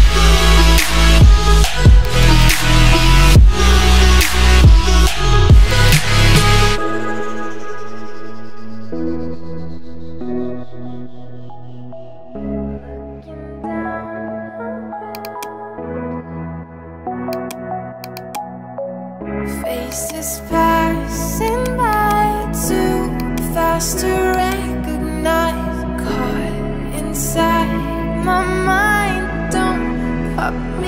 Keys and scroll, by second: 0.6 ctrl+z, 15.7-16.7 typing.